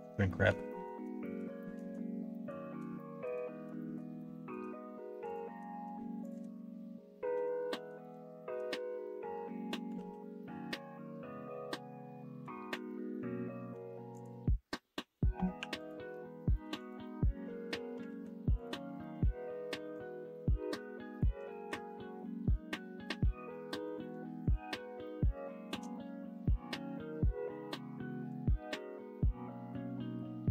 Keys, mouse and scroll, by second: 0.3 middle click, 0.7 shift+middle click, 1.2 middle click, 1.6 shift+middle click, 2.2 middle click, 3.0 shift+middle click, 3.8 middle click, 4.1 shift+middle click, 5.2 click, 7.3 f, 7.9-9.7 middle drag, 9.9 ctrl+z, 10.3-12.4 middle drag, 12.8 middle click, 15.5 3, 15.7 click, 16.5 middle click, 16.8 click, 18.0 alt+z, 18.9 middle click, 19.9-21.1 drag, 21.5 alt+z, 21.8 middle click, 23.0 middle click, 23.9 click, 24.3 click, 24.6 middle click, 25.8 middle click, 26.4-28.2 drag, 28.7 click, 29.6 click.